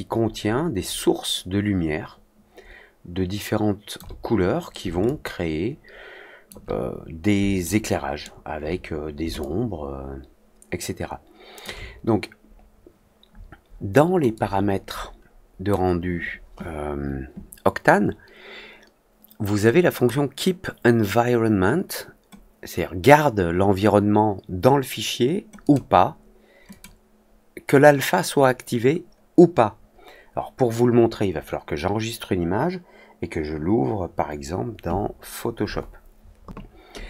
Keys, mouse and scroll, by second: 5.0-6.4 alt+drag, 7.6 alt+middle click, 9.3-11.5 alt+drag, 14.3-15.6 drag, 19.9 click, 25.5 click, 26.6 click.